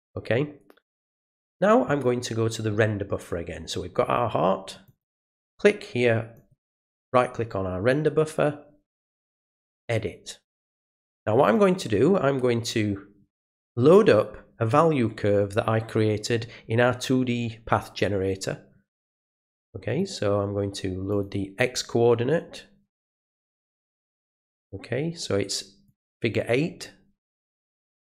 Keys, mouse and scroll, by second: 1.1 click, 4.8 right click, 6.3 right click, 9.1 click, 10.7 click, 19.3 click, 21.1 click, 23.7 click, 25.8 click, 27.3 click.